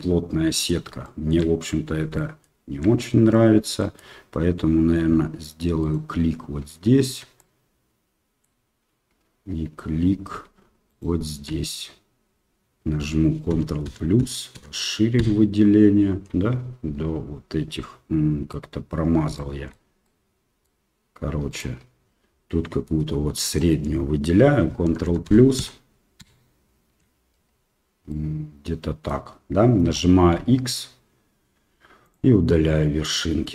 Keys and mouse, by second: 1.1 shift+middle click, 2.1 shift+middle click, 3.4 middle click, 3.8 middle click, 5.8 alt+click, 7.3-8.4 middle drag, 10.9 alt+shift+right click, 13.5 ctrl+KP_Add, 13.8 ctrl+KP_Add, 14.2 ctrl+KP_Add, 14.5 ctrl+KP_Add, 15.2 ctrl+KP_Add, 17.6 middle click, 19.3 shift+middle click, 20.0 middle click, 21.5 right click, 22.4 middle click, 23.5 alt+right click, 24.8 ctrl+KP_Add, 25.0 ctrl+KP_Add, 25.2 ctrl+KP_Add, 25.5 ctrl+KP_Add, 26.1 ctrl+KP_Add, 28.1-29.1 middle drag, 30.3 x, 33.0 middle click.